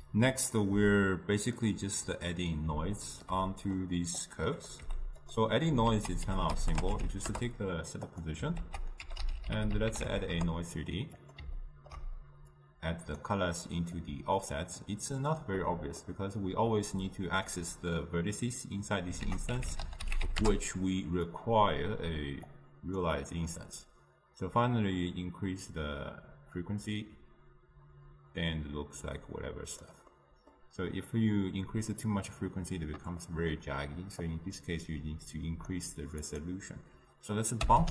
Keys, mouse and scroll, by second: 7.4 ctrl+a, 10.4 ctrl+a, 13.3-14.5 drag, 14.5-20.5 middle drag, 20.5 ctrl+a, 26.8-31.1 drag, 31.1 scroll down 1, 31.2-34.5 middle drag, 34.5-37.9 drag.